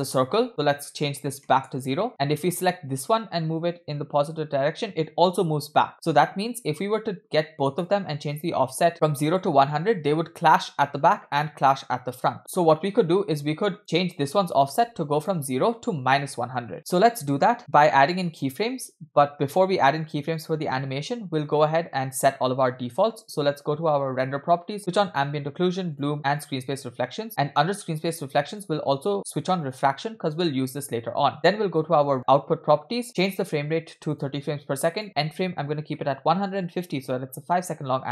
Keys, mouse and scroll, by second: 1.2 BackSpace, 2.5 click, 3.9-8.0 drag, 12.4-13.8 drag, 15.2-16.7 drag, 24.2 click, 25.1 click, 26.0 drag, 26.4 drag, 28.5 click, 29.7 click, 31.3 click, 32.1 click, 33.2-34.3 drag, 35.0-36.7 drag, 37.8-38.1 scroll down 1.